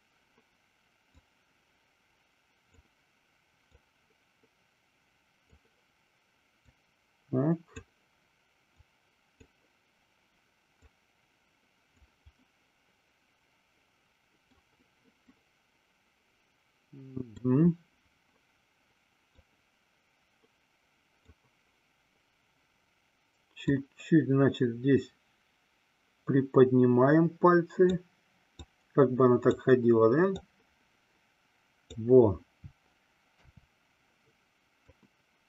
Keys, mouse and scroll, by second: 1.6-3.1 drag, 4.1-5.8 drag, 7.0-8.1 drag, 9.1 click, 11.2-12.3 drag, 12.6-14.8 middle drag, 15.5-17.6 middle drag, 19.6-21.6 drag, 24.1-28.4 drag, 29.1 click, 30.7-32.2 drag, 33.6 KP_3, 35.2-35.4 drag.